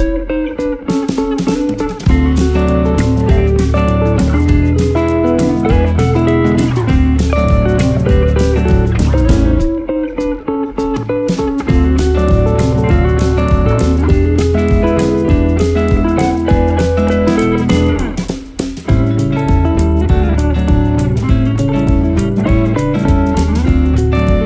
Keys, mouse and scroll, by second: 2.6-8.6 shift+drag, 8.6-13.1 drag, 17.5 shift+click, 20.0 shift+click, 21.2 shift+scroll down 1, 22.5 shift+click.